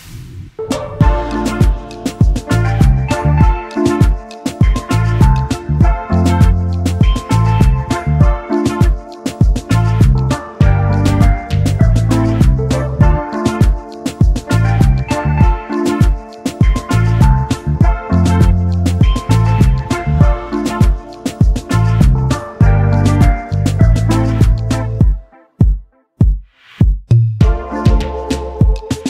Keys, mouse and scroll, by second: 2.1-2.5 alt+scroll up 1, 7.2 ctrl+x, 10.2 double click, 13.5 ctrl+f, 17.0 space, 25.8 space, 25.9 double click, 26.3 space, 28.8 alt+scroll down 1.